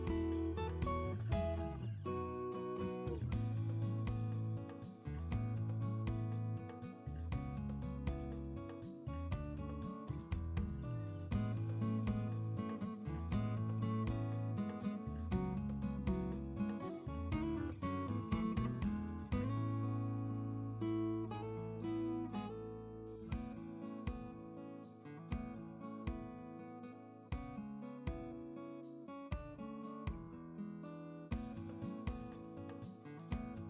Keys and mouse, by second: 6.5-7.7 drag, 8.9-10.7 drag, 11.0 click, 11.9-15.2 drag, 15.9 Tab, 18.0 click, 19.5 ctrl+space, 26.1 KP_7, 26.5 alt+middle click.